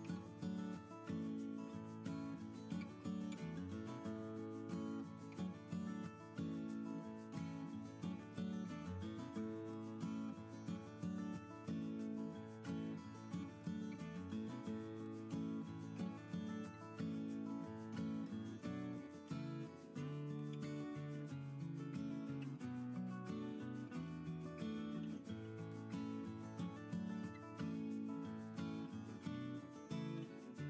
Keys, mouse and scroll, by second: 12.1-12.4 typing, 13.6 2.